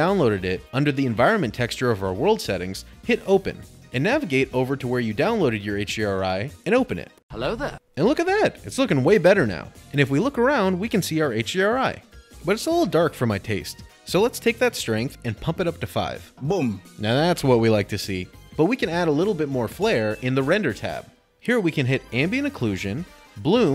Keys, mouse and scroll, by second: 1.3 middle click, 3.7 click, 4.7 click, 5.3 click, 5.5 click, 5.9 click, 6.0 click, 7.0 click, 7.9 click, 11.2 click, 12.2 middle click, 14.7 click, 15.9 5, 16.2 Return, 18.0 middle click, 19.7 click, 22.3 click, 23.4 click.